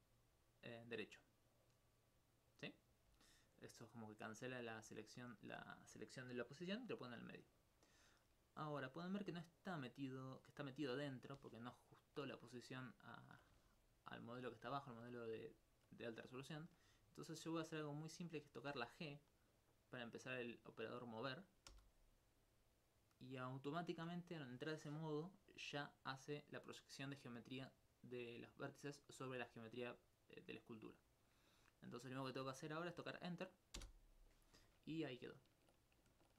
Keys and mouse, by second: 1.5 right click, 3.9 alt+click, 11.9 alt+click, 14.2 alt+click, 14.8 alt+click, 15.6 alt+click, 21.7 g, 33.8 Return, 35.1 alt+click.